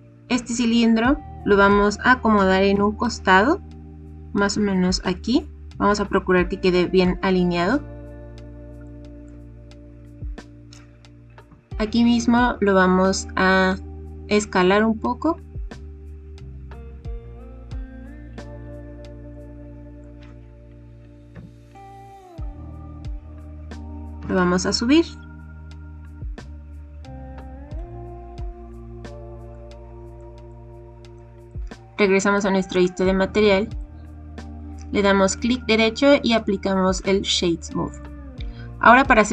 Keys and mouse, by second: 2.3 g, 2.7 x, 8.9 shift+middle click, 11.4 s, 18.6 click, 19.4-19.8 middle drag, 19.8 click, 21.3 KP_1, 23.7 g, 24.2 z, 27.7 click, 28.7-29.4 middle drag, 30.1-30.4 middle drag, 31.1 middle click, 32.7 click, 33.6 middle click, 35.3 click, 38.0 middle click.